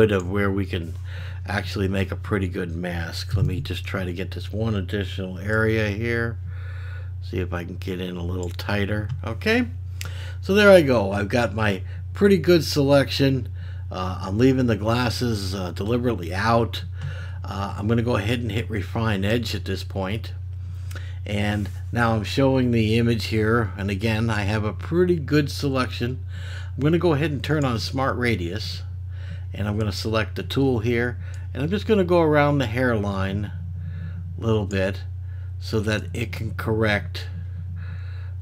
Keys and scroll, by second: 3.3 [.